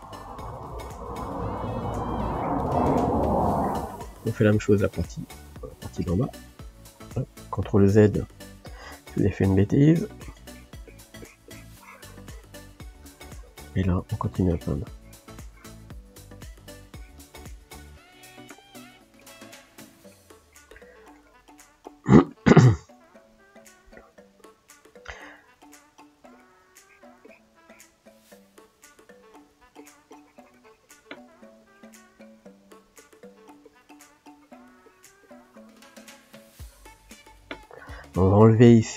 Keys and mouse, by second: 0.9-2.3 middle drag, 2.3 click, 3.3-5.2 middle drag, 5.2 click, 5.6-7.9 middle drag, 7.9 ctrl+z, 8.2-9.9 shift+middle drag, 9.9-12.7 drag, 12.7 shift+middle click, 13.3-15.8 drag, 15.8-17.0 middle drag, 17.0-18.8 drag, 18.8-25.7 middle drag, 25.7-28.8 drag, 28.8 f, 29.8-38.9 ctrl+drag.